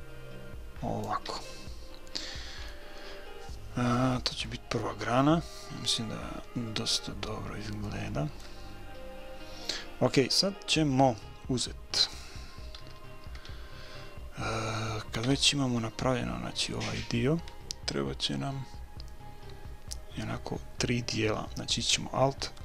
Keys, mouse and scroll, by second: 1.3 a, 1.6 click, 1.8-4.4 middle drag, 5.9-9.6 middle drag, 12.8 a, 13.2 a, 15.2 KP_1.